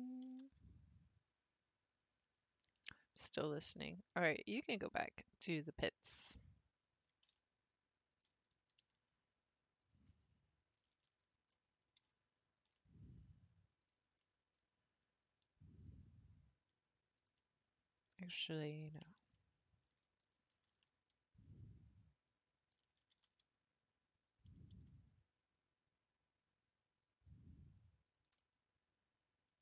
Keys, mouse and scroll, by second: 0.0 click, 0.3 g, 2.2 scroll down 1, 2.4-2.9 scroll up 1, 4.5 click, 5.4-8.1 middle drag, 8.1 alt+click, 8.8 s, 10.1-13.8 middle drag, 13.8 click, 14.2-15.8 middle drag, 15.8 click, 16.4-17.2 scroll up 2, 17.2 ctrl+click, 18.1 click, 18.9 ctrl+click, 19.3 middle click, 20.3 r, 23.1 g, 28.4-29.6 middle drag.